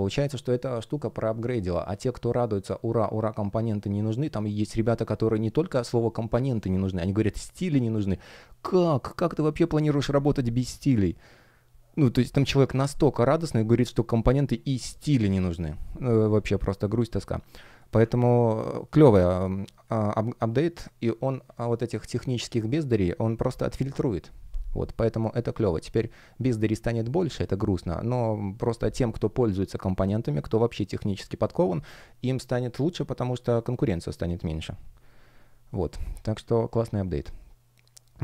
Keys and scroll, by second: 18.7 space.